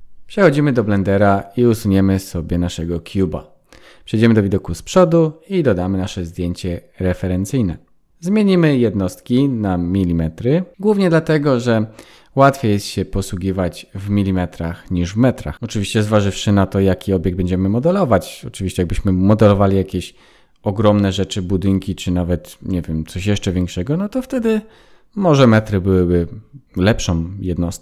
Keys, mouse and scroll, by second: 0.2 Delete, 1.6 KP_1, 2.5 scroll up 1, 2.8 shift+a, 8.1 click, 8.7 click, 11.2 click, 25.1 shift+a.